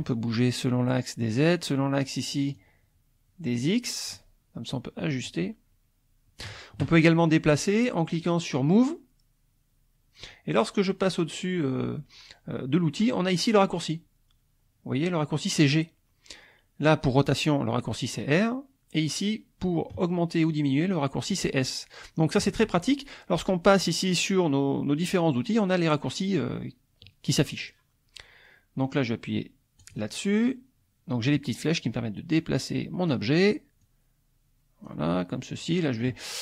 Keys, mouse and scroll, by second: 2.5-4.3 drag, 5.3-6.6 drag, 29.8 click, 31.7-33.3 drag, 33.8-35.1 drag.